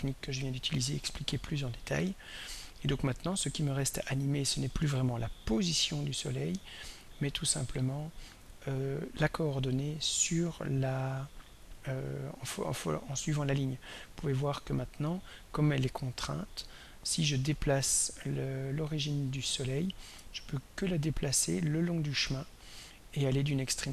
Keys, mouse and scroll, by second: 3.4 click, 9.0-11.2 drag, 14.3 click, 18.2 click, 19.8-23.9 drag.